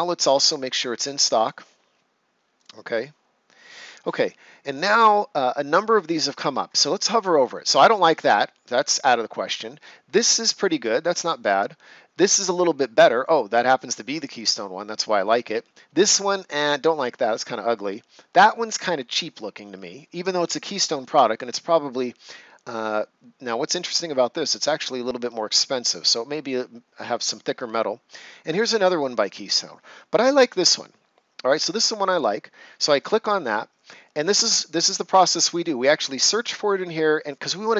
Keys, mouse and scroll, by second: 1.3 click, 4.0 scroll down 1, 32.0 click.